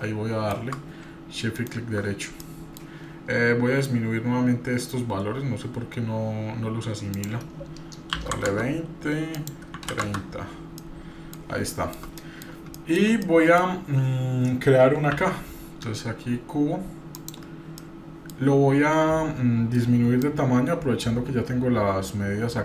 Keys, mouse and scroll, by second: 0.0-0.7 shift+middle drag, 2.4 middle click, 7.2-8.7 drag, 9.3 click, 10.8-12.0 middle drag, 12.2 middle drag, 12.8 shift+middle click, 13.2 middle click, 15.1 shift+a, 17.8 middle click, 20.2-22.6 drag.